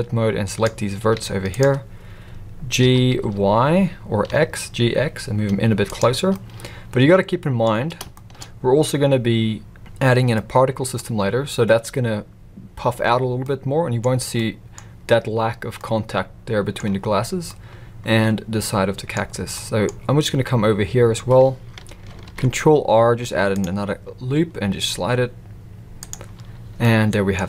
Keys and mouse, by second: 1.1 z, 2.8 g, 6.3-7.6 middle drag, 8.1 shift+middle drag, 10.3 middle click, 13.4 middle click, 14.4 middle click, 15.8 middle click, 17.4-19.1 middle drag, 19.5 middle click, 22.2 ctrl+r, 26.8 middle click.